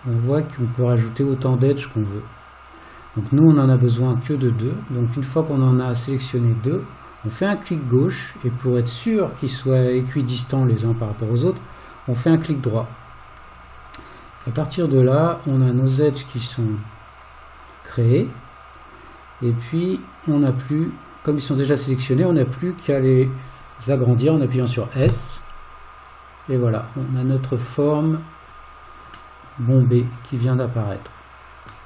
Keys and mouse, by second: 14.9-23.0 middle drag, 25.1 s, 29.4-31.7 middle drag.